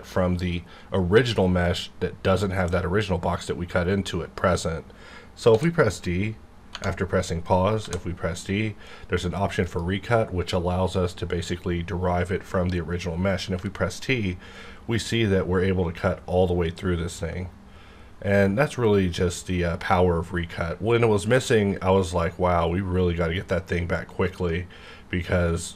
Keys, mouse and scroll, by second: 5.5 d, 6.7 Tab, 7.8 d, 9.6 click, 13.5 t.